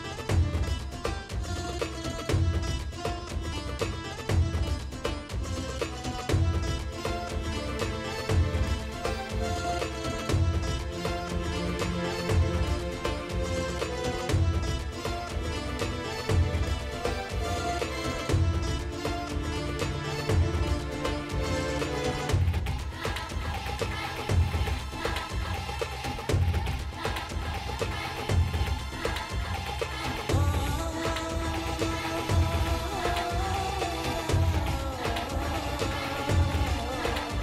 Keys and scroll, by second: 1.8 [, 14.6 F9, 14.8 s, 15.1 ], 23.5 space, 30.6 space, 30.8 [.